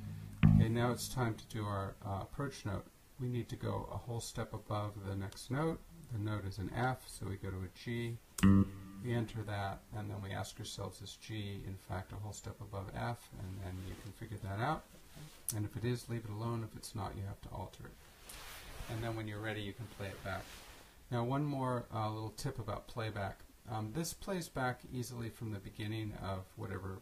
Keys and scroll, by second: 5.6 Up, 8.4 Return.